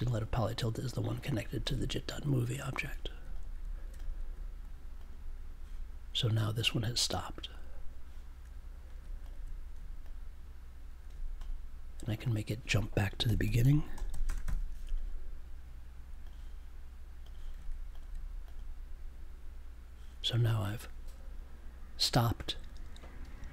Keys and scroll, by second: 13.2 f, 14.1 e, 14.2 space, 14.4 o.